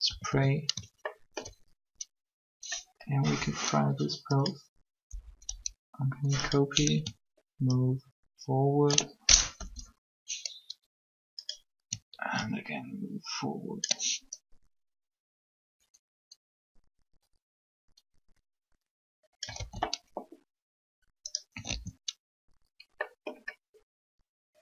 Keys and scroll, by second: 0.0 alt+shift+a, 0.2 alt+shift+a, 4.9 Up, 9.6 ctrl+Up, 19.6 alt+a, 21.6 alt+a.